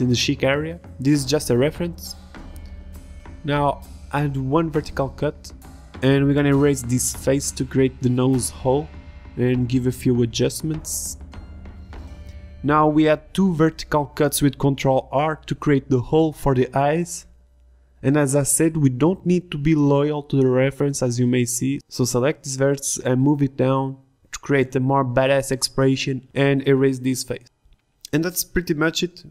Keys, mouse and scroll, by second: 0.0-3.9 typing, 0.2 ctrl+z, 1.0 ctrl+r, 2.2 Tab, 2.4 Tab, 3.3 ctrl+r, 4.6 ctrl+r, 5.8 a, 8.5 ctrl+Tab, 9.1 Delete, 10.1 Tab, 10.4 Tab, 10.8-12.0 typing, 11.4 ctrl+Tab, 13.8 a, 13.9 b, 15.8 ctrl+r, 16.6 ctrl+r, 17.4 ctrl+z, 17.6 ctrl+r, 20.0 ctrl+Tab, 20.7 Delete, 21.1 ctrl+Tab, 23.4-24.6 middle drag, 24.6 click, 24.7 z, 25.0 z, 26.1 click.